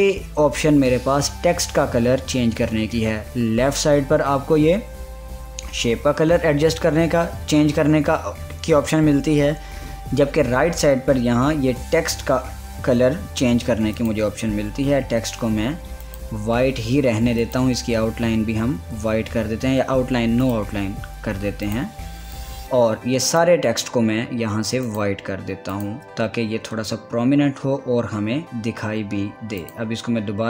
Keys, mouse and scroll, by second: 17.6 click, 21.0 click, 21.2-25.5 drag, 27.5 scroll down 1, 30.2 click.